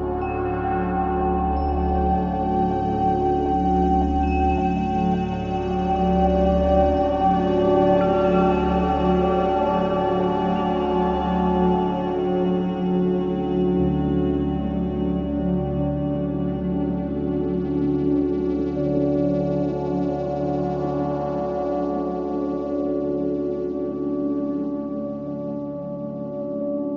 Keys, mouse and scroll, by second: 2.6-4.3 scroll up 2, 5.1-6.0 drag, 6.7-8.5 drag, 9.6-11.1 drag, 15.4 click, 19.6 click, 21.7 ctrl+z, 21.9 click, 22.6 click, 24.1 click, 26.3 click.